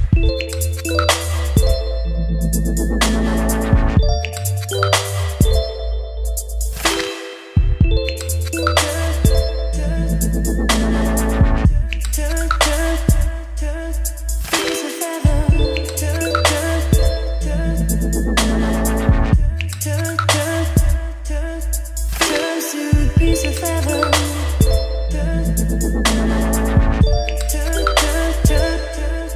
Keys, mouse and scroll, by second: 0.0-1.5 typing, 1.9 ctrl+s, 3.5-6.3 drag, 7.4 click, 8.2 Return, 9.9 /, 10.3 Return, 11.4-14.2 typing, 14.3 Return, 15.4 middle click, 15.9-17.2 typing, 18.4 Return, 19.4 ctrl+z, 19.7-22.4 typing, 20.9 Return, 23.5 Return, 24.1 shift+], 24.3 Return, 25.7-26.8 typing, 27.8 Return, 27.9-29.3 typing.